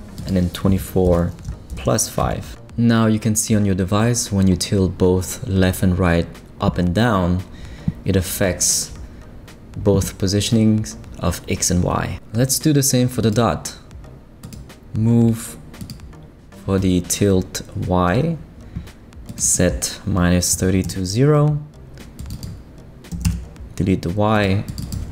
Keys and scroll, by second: 0.5 shift+=, 1.0 shift+5, 1.6 Return, 20.5 0, 20.8 Return, 23.1 BackSpace, 23.2 Return.